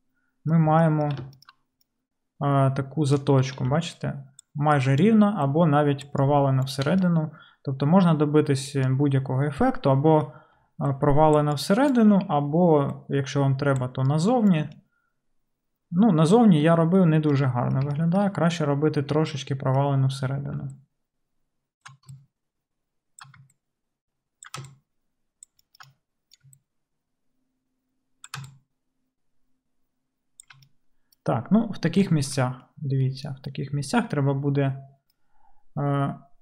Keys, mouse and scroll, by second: 3.7-5.4 d, 6.1 d, 6.2-6.9 d, 8.3-10.1 middle drag, 10.6-14.7 typing, 14.8-36.4 middle drag.